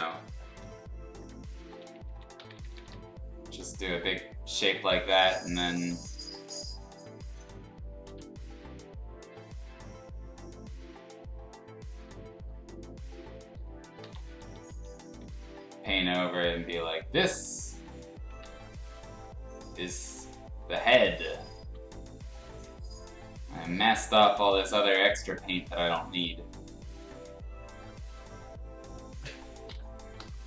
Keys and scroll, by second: 1.7-2.8 typing, 8.1 x, 14.0-15.2 typing, 18.4 ctrl+z, 21.6 ctrl+z, 30.2 e.